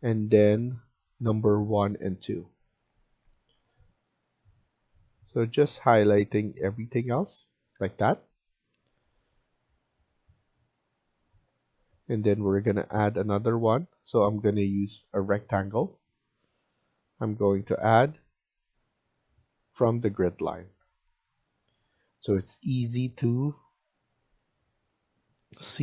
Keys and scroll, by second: 7.3 Escape, 20.1 Escape.